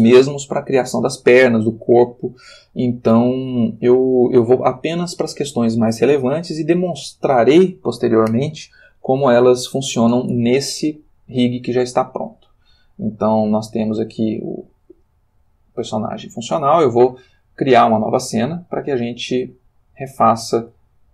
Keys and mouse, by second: 13.5 click, 15.2 click, 15.9 r, 16.6 Escape, 18.1 click, 20.0 click.